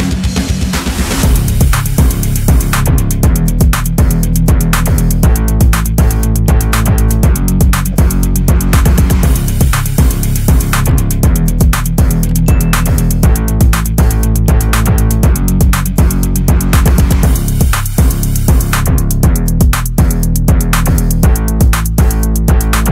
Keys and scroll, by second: 1.5-2.0 typing, 20.6 Right.